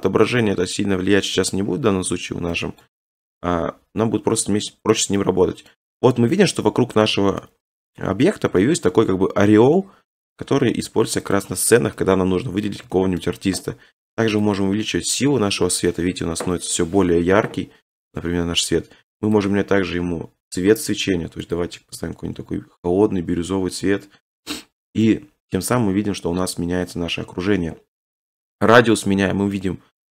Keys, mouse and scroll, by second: 1.5 click, 1.7-2.4 scroll up 4, 2.9 shift+middle click, 3.3 g, 3.5 z, 4.0-4.3 scroll, 5.1 click, 5.8 middle click, 5.9 middle click, 5.9 middle click, 6.4 shift+middle click, 7.1 middle click, 8.0 middle click, 9.0 middle click, 10.1-10.9 scroll, 11.4 click, 11.7-12.7 scroll, 12.7 scroll, 13.3 scroll, 18.2 click, 18.5-19.5 scroll, 19.5 click, 21.6 click, 23.5 click, 26.9 scroll.